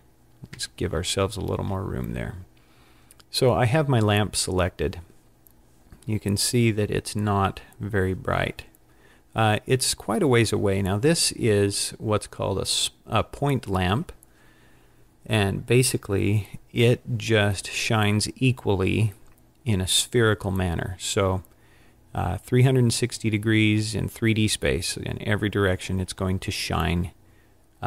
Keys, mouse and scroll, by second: 0.6 n.